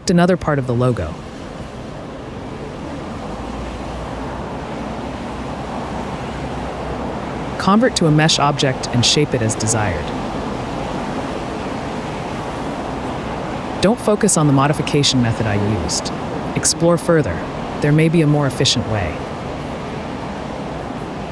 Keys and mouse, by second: 0.5 click, 1.2 shift+d, 2.6 click, 6.0 /, 7.2 click, 7.9 click, 9.9 Tab, 10.3 click, 12.4 click, 15.5 g, 15.6 y, 16.0 click, 17.8 shift+click, 21.1 ctrl+click.